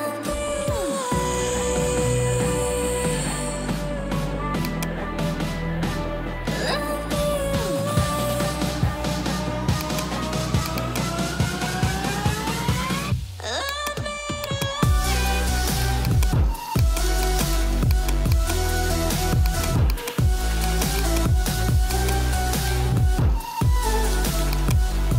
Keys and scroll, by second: 0.6 Right, 1.0 BackSpace, 2.4 Return, 11.5 1, 11.8 0, 12.0 Return, 23.1 ctrl+j.